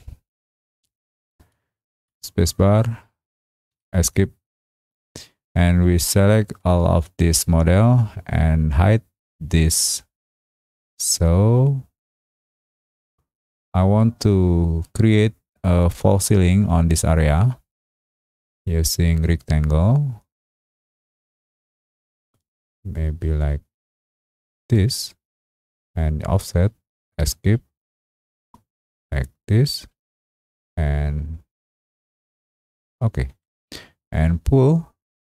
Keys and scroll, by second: 3.7 Escape, 27.2 Escape.